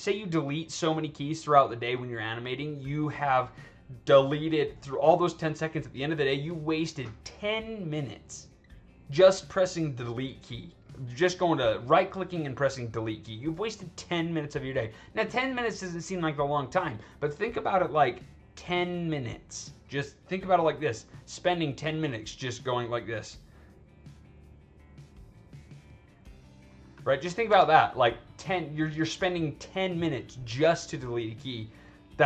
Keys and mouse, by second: 12.1 right click, 23.1 click, 23.4 right click, 24.4 right click, 25.6 click, 25.9 right click, 28.2 click.